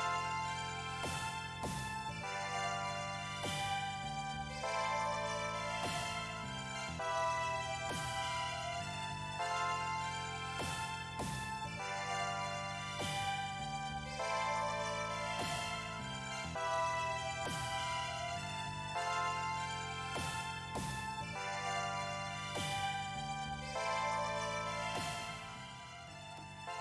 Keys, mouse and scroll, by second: 1.2 click, 11.2 click, 18.2 click, 21.8-26.8 drag.